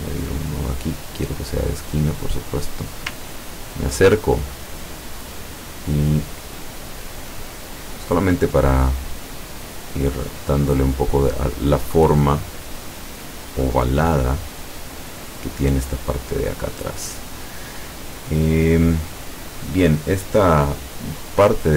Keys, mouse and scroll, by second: 0.1 click, 1.9 click, 3.4-3.9 ctrl+scroll up 1, 5.9 click, 7.2-8.4 drag, 9.1-11.2 drag, 12.0-13.5 drag, 14.2-15.4 drag.